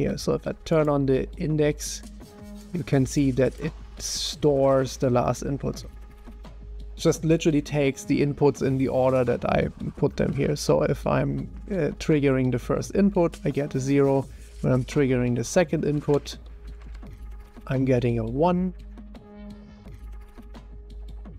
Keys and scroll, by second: 6.0 1, 16.8-17.4 typing, 19.7-21.3 typing.